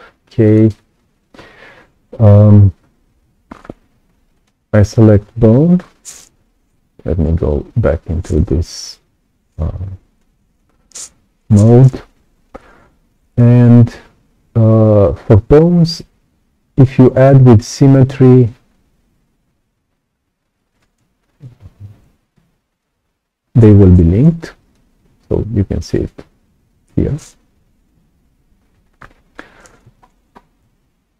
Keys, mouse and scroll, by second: 0.4 click, 4.3 click, 7.0 r, 18.7-21.2 drag, 20.8 Escape, 22.3 F1, 22.7-24.7 drag, 27.9 x, 28.5-28.9 scroll up 2, 28.9 right click, 29.9-30.6 ctrl+scroll up 2, 30.6 scroll up 1.